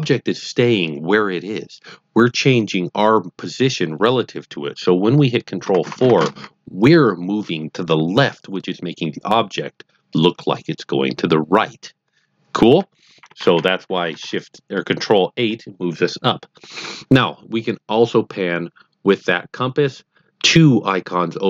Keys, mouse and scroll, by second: 5.6 ctrl+KP_4, 5.8 ctrl+KP_4, 5.9 ctrl+KP_4, 6.1 ctrl+KP_4, 13.2 ctrl+KP_8, 13.4 ctrl+KP_8, 13.5 ctrl+KP_8, 13.7 ctrl+KP_8, 13.8 ctrl+KP_8, 14.0 ctrl+KP_8, 14.2 ctrl+KP_8.